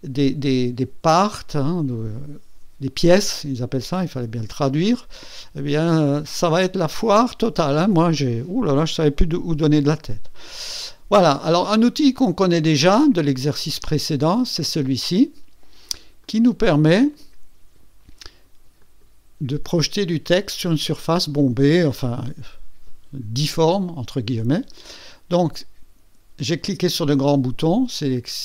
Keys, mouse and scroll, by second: 16.2 click, 18.8 click.